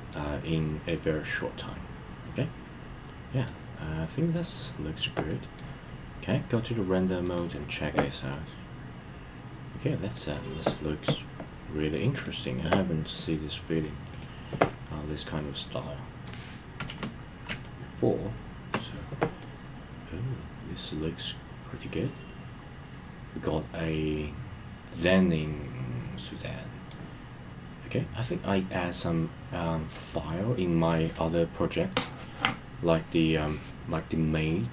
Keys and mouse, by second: 2.4-3.5 middle drag, 5.3 middle click, 7.2 click, 8.3-10.2 middle drag, 12.2 click, 13.2-14.2 drag, 17.6-18.8 shift+middle drag, 19.4-26.9 middle drag.